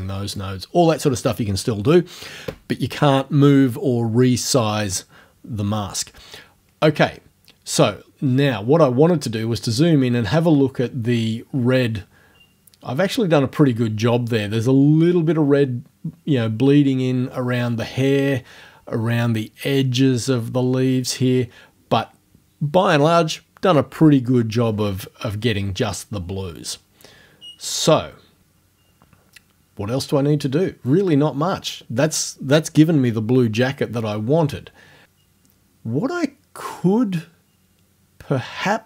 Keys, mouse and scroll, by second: 8.2-8.5 scroll up 2, 24.6 scroll down 2, 36.8-37.1 scroll down 2.